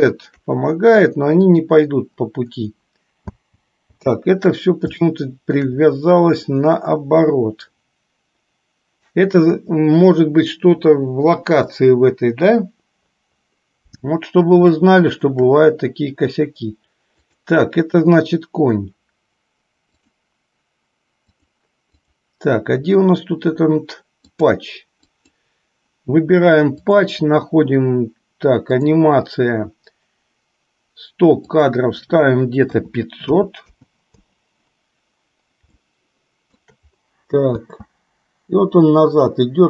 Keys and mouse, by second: 1.7 click, 3.4 space, 4.2 space, 5.3 shift+middle click, 15.1-15.6 shift+middle drag, 17.3 click, 21.4 click, 21.9 click, 25.3 click, 27.0 click, 28.8 click, 31.5-34.6 drag, 36.0-36.8 shift+middle drag, 37.7 space.